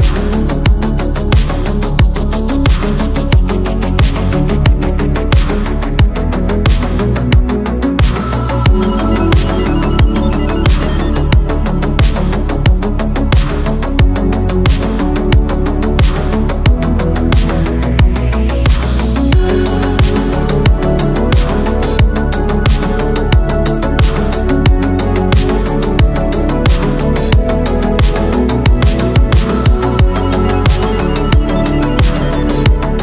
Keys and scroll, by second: 0.0 ctrl+z, 1.0 ctrl+z, 1.9 ctrl+z, 2.4 ctrl+z, 2.6 ctrl+z, 2.9 ctrl+z, 3.1 ctrl+z, 3.3 ctrl+z, 5.5 ctrl+z, 6.4 ctrl+z, 11.0 ctrl+z, 11.5 ctrl+z, 13.1 ctrl+z, 14.2 ctrl+z, 19.7 ctrl+z, 20.5 ctrl+z, 22.4 space, 23.3 ctrl+z, 24.4 ctrl+z, 25.6 ctrl+z, 27.1 ctrl+z, 30.0 ctrl+z, 31.0 ctrl+z.